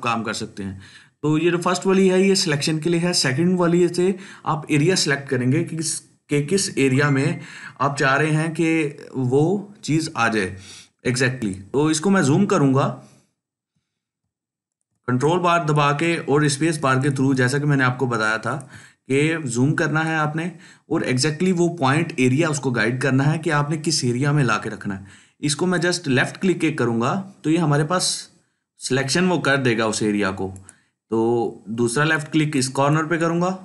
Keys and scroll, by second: 14.1 ctrl+space, 14.6-16.5 ctrl+space.